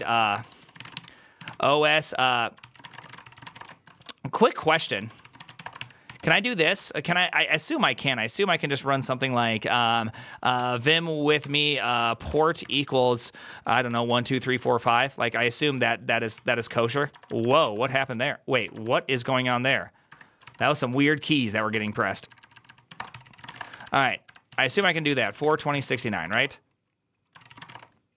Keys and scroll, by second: 0.0-6.7 typing, 11.9-12.5 typing, 13.8-19.0 typing, 17.5 ctrl+KP_8, 20.2-27.5 typing, 27.3 ctrl+c.